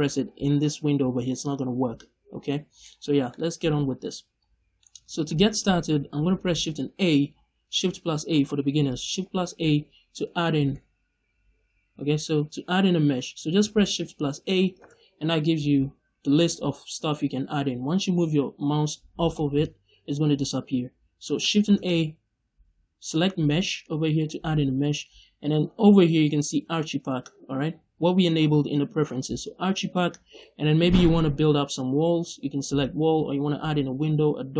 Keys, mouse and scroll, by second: 2.8 scroll up 1, 3.2 middle click, 3.8 scroll down 1, 4.0 middle click, 10.4 shift+a, 14.6 shift+a, 21.5 shift+a.